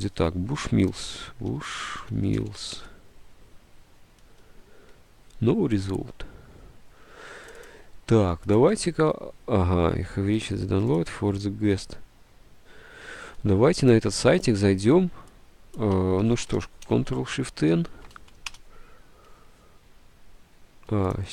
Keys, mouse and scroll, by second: 0.7-3.2 typing, 16.3 ctrl+c, 16.9 ctrl+shift+n, 17.0 ctrl+c, 17.9 ctrl+v, 20.5 Return.